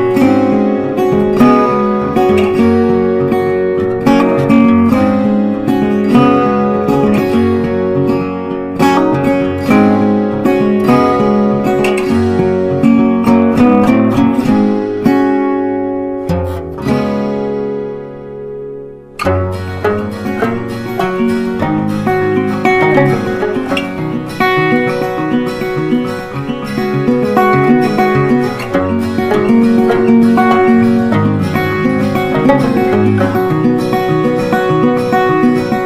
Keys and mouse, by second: 5.4 right click, 6.4-9.0 drag, 9.0 right click, 10.3 click, 26.1-29.7 typing, 30.1-33.2 drag, 33.2-35.8 drag.